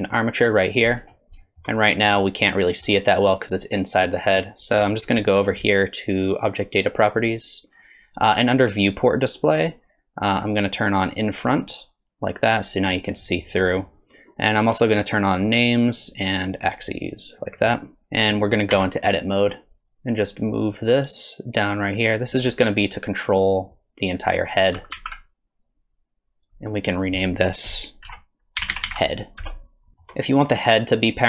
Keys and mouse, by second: 1.4 shift+drag, 1.9 click, 6.7 click, 11.4 click, 15.3 click, 16.8 click, 17.4 middle drag, 18.0 KP_3, 18.7 Tab, 20.8-22.1 drag, 22.7 click, 23.5-24.5 drag, 25.0 alt+z, 25.7 click, 27.0 click, 28.1 F2, 29.9 shift+click.